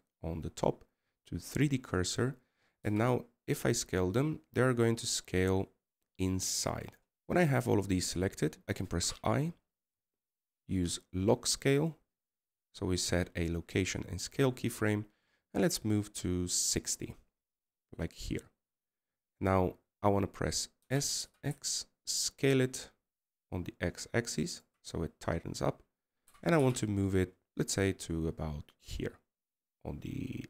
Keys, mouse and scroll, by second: 7.2 middle click, 7.7 3, 8.1 4, 9.7 i, 11.7 i, 17.9-23.5 drag, 23.5 s, 28.2-29.0 scroll down 1, 29.0 g.